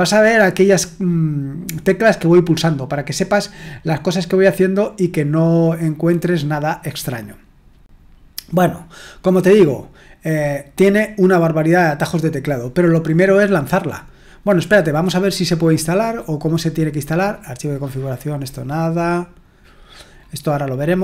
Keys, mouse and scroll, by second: 9.3-10.4 scroll down 1, 10.4-14.4 scroll down 1, 14.4-18.4 scroll down 1, 18.4-19.9 scroll down 1, 19.9-21.0 scroll down 1.